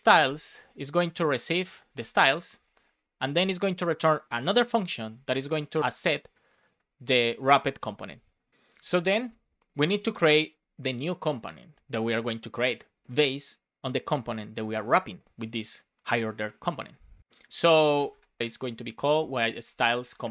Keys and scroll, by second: 0.6 shift+9, 2.4 Right, 2.5 space, 3.1 shift+., 3.3 space, 4.4 shift+9, 5.0 shift+w, 6.7 BackSpace, 7.7 shift+c, 8.8 Return, 9.5 Up, 10.0 Tab, 18.1 space, 19.0 shift+s, 20.0 shift+c.